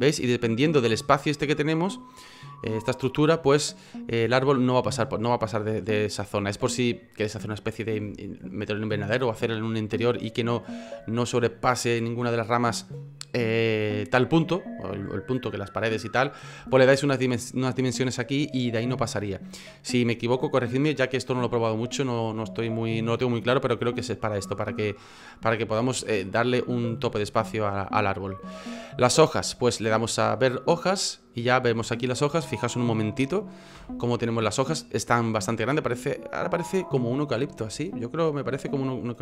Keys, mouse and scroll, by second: 33.7 F9, 37.6 F9.